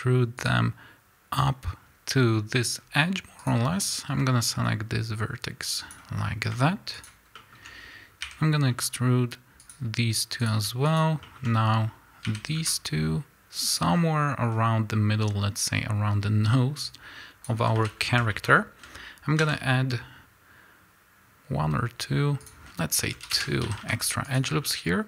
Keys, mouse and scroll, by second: 0.3 click, 2.7 scroll up 1, 3.4 click, 3.9-6.9 drag, 7.3-9.6 shift+middle drag, 8.2 e, 9.6 click, 10.9 shift+click, 11.2-13.7 shift+middle drag, 12.2 e, 13.7 click, 13.9 scroll down 1, 16.8-18.2 drag, 17.5 a, 17.9-18.5 scroll up 2, 18.2-24.2 shift+middle drag, 19.3 ctrl+r, 23.6 a, 24.2 click, 24.5 scroll up 1.